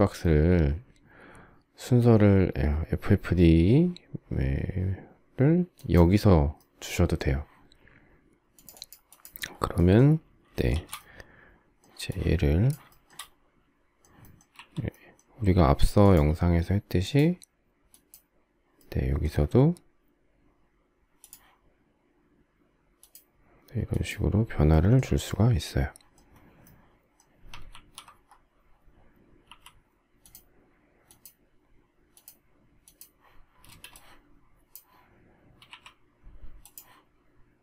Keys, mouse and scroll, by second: 10.4 shift+s, 12.6 shift+middle click, 15.5 q, 27.4 alt+f, 29.2 m, 33.3 space, 35.4 q.